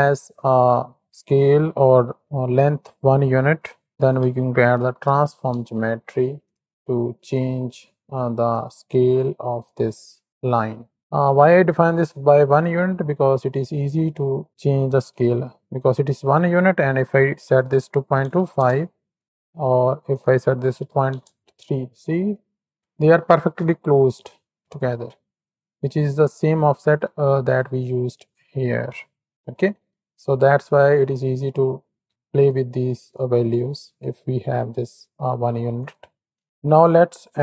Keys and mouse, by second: 0.1-6.5 drag, 6.7-7.2 drag, 7.5 middle click, 8.2 click, 8.9-9.9 drag, 10.2 click, 11.4 click, 12.0 click, 13.7 shift+click, 14.5 middle click, 17.3-18.5 drag, 19.2 KP_7, 20.0-21.1 drag, 22.2-22.7 middle drag, 23.5 KP_7, 25.1 middle click, 27.4 click, 28.1-29.3 drag, 30.2 click, 32.1 click, 33.2-33.6 drag, 33.8 click, 35.7 click, 37.0 click.